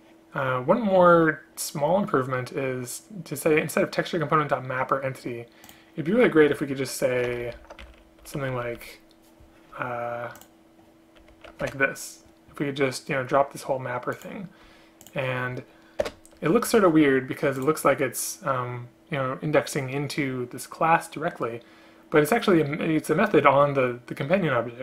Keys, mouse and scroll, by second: 7.4 ctrl+Left, 7.5 ctrl+Left, 7.7 ctrl+Left, 8.3 Left, 10.5 shift+click, 11.4 shift+Right, 11.7 Delete, 15.2 shift+click, 16.1 BackSpace.